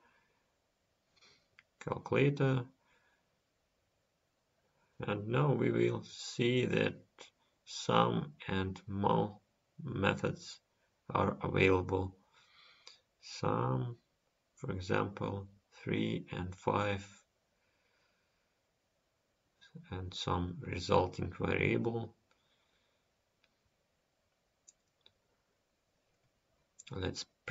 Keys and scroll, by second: 23.5 End.